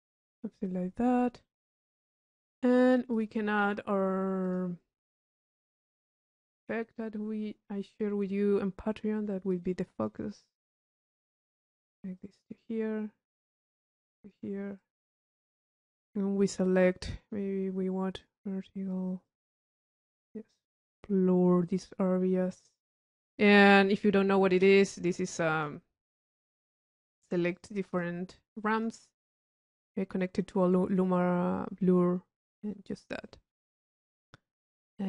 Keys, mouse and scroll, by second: 1.6 right click, 2.6 middle click, 3.2 click, 4.6 click, 6.5 click, 9.7-10.3 drag, 11.1 click, 15.0 click, 16.6 click, 17.2 click, 18.4 click, 19.4-20.8 drag, 21.2-23.0 drag, 23.6 click, 25.5-27.1 drag, 27.4 click, 27.7-28.3 drag, 28.6-29.4 drag, 29.7 click, 32.8 u, 33.4 click.